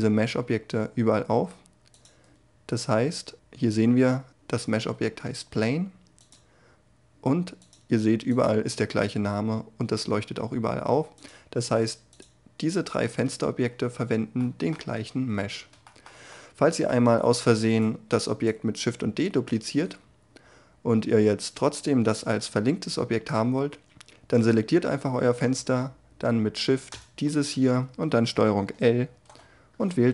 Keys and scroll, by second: 14.5 Tab, 17.2 shift+d, 28.6 ctrl+l.